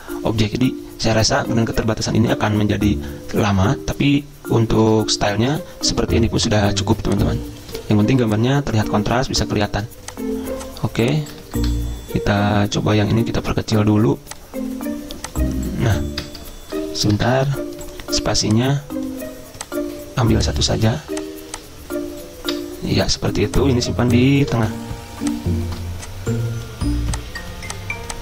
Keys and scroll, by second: 5.2 ctrl+z, 9.3 Delete, 11.7 shift+Return, 16.4 BackSpace, 16.7 BackSpace, 17.5 shift+Return, 22.8 BackSpace.